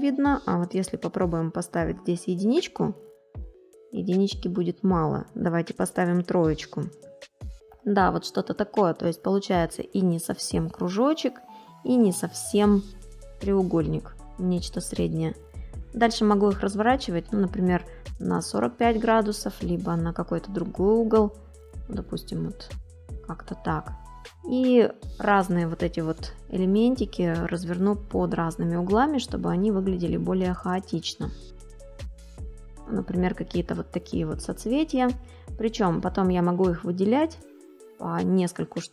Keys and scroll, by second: 9.6 ctrl+=, 10.8 space.